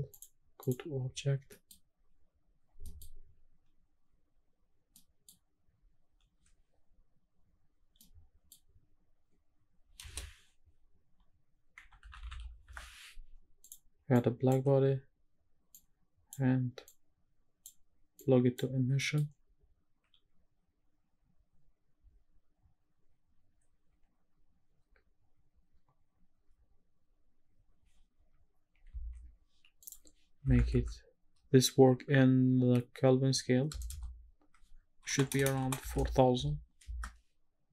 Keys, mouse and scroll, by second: 0.1-0.7 drag, 2.3-2.7 scroll down 1, 4.4 middle click, 4.4-6.6 scroll up 2, 6.6 middle click, 6.6-7.5 scroll up 1, 8.0 middle click, 9.4-10.8 scroll down 1, 10.8-14.1 scroll down 1, 10.8 space, 14.1-14.6 drag, 15.8-16.3 drag, 16.8-17.7 drag, 18.2 click, 19.0 middle click, 20.1 scroll up 1, 23.0-23.4 scroll up 3, 29.0 ctrl+s, 29.8-37.0 drag, 33.9 KP_0, 35.3 BackSpace, 35.6 BackSpace, 36.1 KP_0.